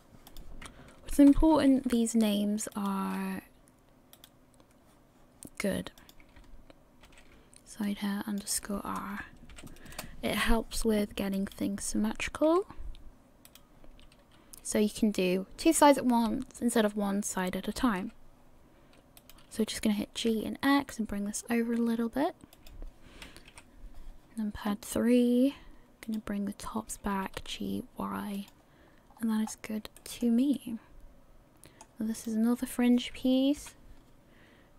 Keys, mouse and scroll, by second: 0.3 click, 1.5 ctrl+c, 4.4 right click, 6.0 click, 11.5 right click, 12.5 g, 23.5 KP_3, 26.2 right click, 27.1 g, 29.1 scroll down 2, 29.5 scroll up 4, 30.0 shift+middle click, 30.5 middle click, 32.4 right click, 33.6 KP_3.